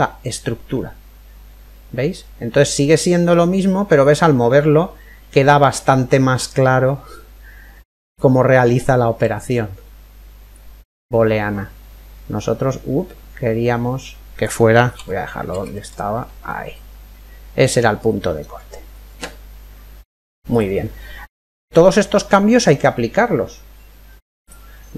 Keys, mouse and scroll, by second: 0.3-2.3 middle drag, 3.7 click, 8.4-10.2 middle drag, 10.2 click, 16.1-18.0 ctrl+middle drag, 20.1 click, 21.1-23.0 middle drag, 24.7 right click.